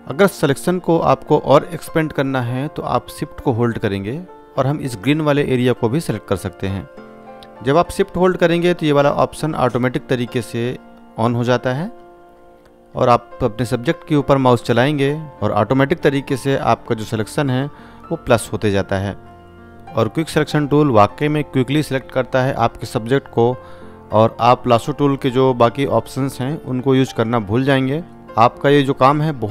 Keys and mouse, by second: 10.8-14.0 drag, 20.7-23.2 drag, 28.3 ctrl+d.